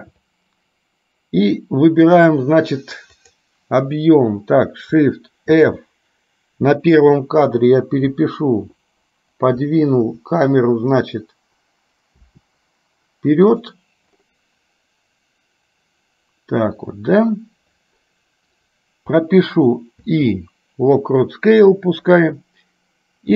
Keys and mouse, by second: 3.4 click.